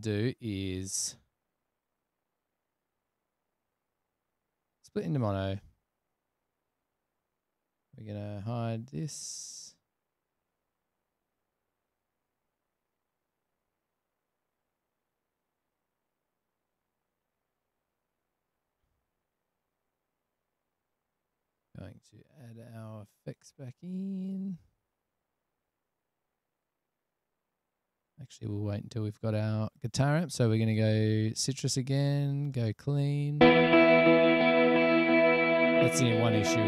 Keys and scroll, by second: 33.6 space.